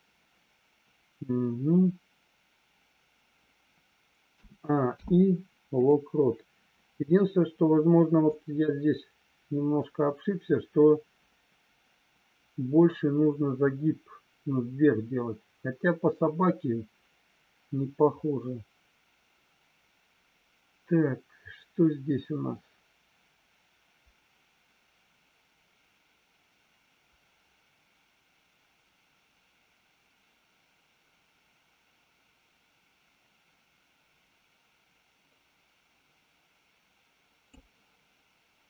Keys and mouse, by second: 4.8 i, 8.3-37.6 drag.